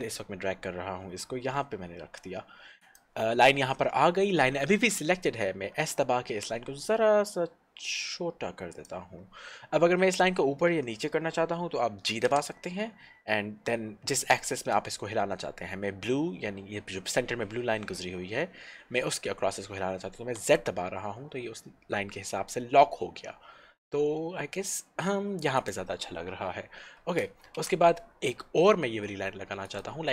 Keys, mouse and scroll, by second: 2.8 click, 8.9 click, 12.4 g, 25.7 click, 27.6 ctrl+r, 29.7 click, 30.0 click.